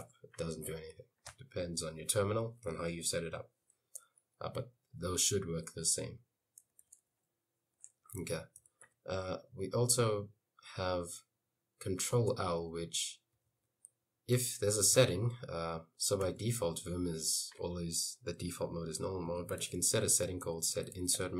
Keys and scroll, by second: 0.2 Escape, 6.7-9.4 typing, 12.4 Escape, 12.6-15.0 typing, 14.5 Escape, 16.5 shift+;, 19.1-21.3 typing.